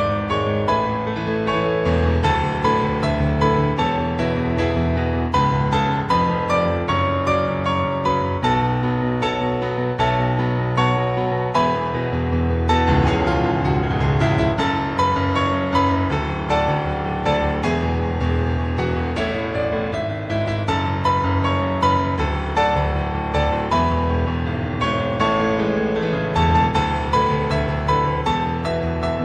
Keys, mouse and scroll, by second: 1.6 scroll up 2, 1.9 middle click, 5.8-6.4 scroll down 3, 6.4 middle click, 8.9 ctrl+z, 10.5 middle click, 10.9-11.4 scroll up 2, 11.4 middle click, 14.0 click, 14.4-15.7 scroll up 8, 15.7 click, 19.1 click, 22.9 click, 24.6 click, 24.9-26.7 scroll down 10, 26.7-27.1 scroll down 1, 27.2 click.